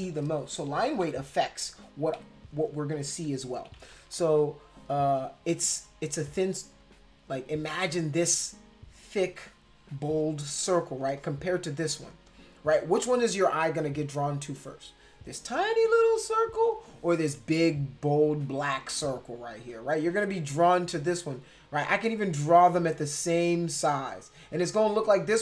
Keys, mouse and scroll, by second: 0.7 ctrl+=, 0.8 ctrl+=, 1.0 ctrl+=, 2.1 ctrl+=, 3.6 ], 3.8 ], 3.9 ], 4.1 ], 5.6 space, 5.7 click, 6.8-10.8 drag, 11.0 space, 11.2 click, 12.1 space, 12.3 click, 21.8-24.3 drag.